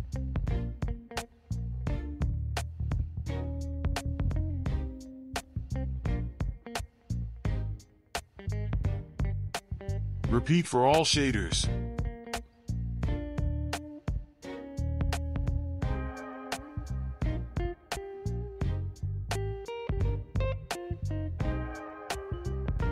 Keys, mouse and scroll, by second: 0.5 click, 3.3 right click, 7.6 click, 9.9 click, 10.2 right click, 10.7 click, 11.5 right click, 11.9-12.3 drag, 12.3 right click, 12.8 click, 13.1 right click, 13.7 click, 14.0 right click, 14.3 click, 14.6 click, 15.0 right click, 15.5 click, 15.8 click, 16.0 right click, 16.4 click, 16.8 click, 17.0 right click, 17.5 click, 17.8 right click, 19.1 right click.